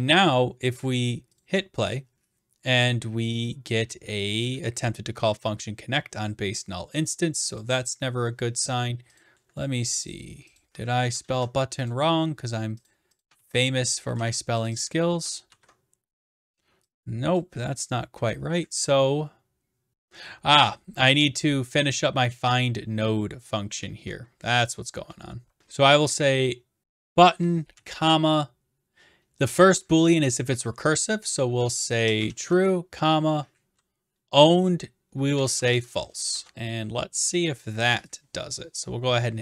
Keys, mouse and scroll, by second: 1.4 click, 7.6 click, 9.2 click, 10.1 click, 10.6 click, 11.3 ctrl+c, 11.9 click, 12.9 click, 13.2 click, 13.4 ctrl+v, 14.1 ctrl+z, 14.7 click, 15.3 click, 15.5 ctrl+v, 17.4 click, 20.7 click, 24.7 click, 27.0 click, 31.3-33.0 typing, 35.1-36.2 typing, 36.3 ctrl+s, 38.2 click.